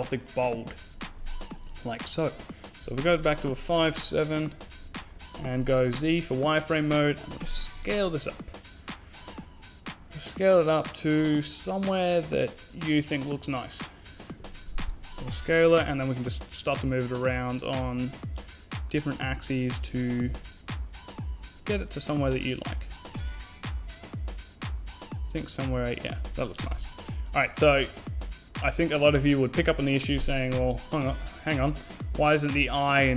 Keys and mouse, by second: 2.4 KP_5, 2.7 KP_7, 4.0-5.8 middle drag, 4.8 z, 7.5 s, 15.6-16.9 drag, 19.2 s.